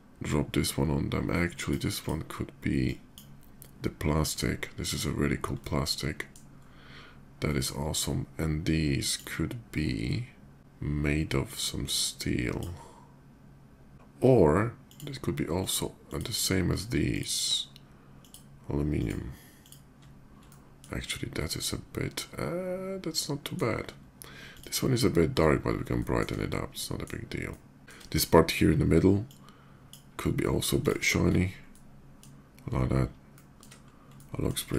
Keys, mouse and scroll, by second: 1.6 click, 2.6 drag, 4.7 middle click, 5.3 middle click, 7.2 middle drag, 8.8 click, 11.1-12.2 drag, 14.6 click, 15.3 click, 15.7 click, 16.9 shift+click, 17.9 shift+click, 18.7 shift+click, 19.3 shift+click, 20.2 middle click, 21.1-23.3 middle drag, 24.2 click, 25.7 shift+middle drag, 26.2-26.8 shift+middle drag, 27.2 shift+middle click, 29.0 shift+click, 30.6 click, 31.5-32.0 middle drag, 33.1 shift+middle drag, 33.9 shift+middle click, 34.5 shift+middle click.